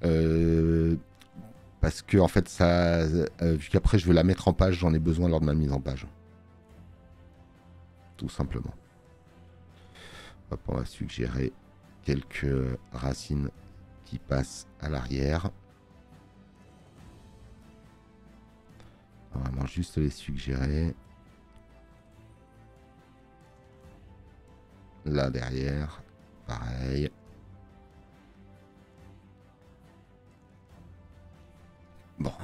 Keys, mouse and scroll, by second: 12.5 space, 31.7 space.